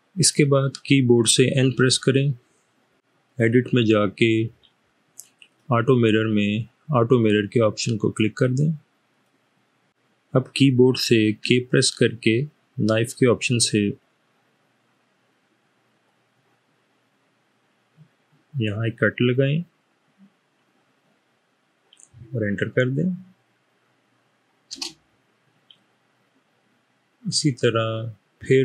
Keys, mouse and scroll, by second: 1.6 n, 11.4 k, 16.0-19.2 drag, 24.9 Return.